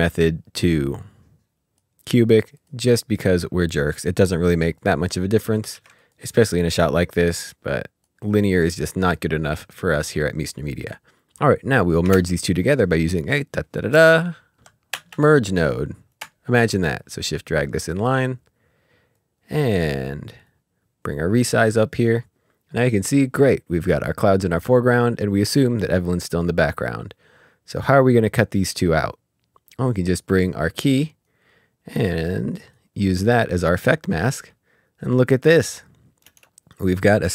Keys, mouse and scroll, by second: 1.7 click, 4.6 click, 5.7 ctrl+s, 6.0 click, 10.7 click, 12.1 space, 13.9-14.5 typing, 14.9 Return, 16.1 click, 20.4 click, 26.8 click, 31.2 right click, 33.6 click, 36.2 space.